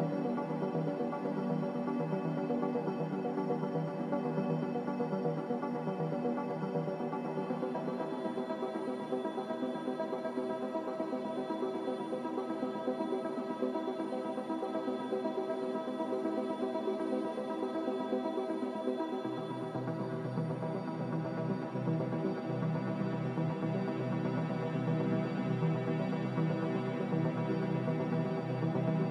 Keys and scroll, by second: 4.6 ctrl+k, 9.2 ctrl+c, 23.8 ctrl+z, 27.6 ctrl+c.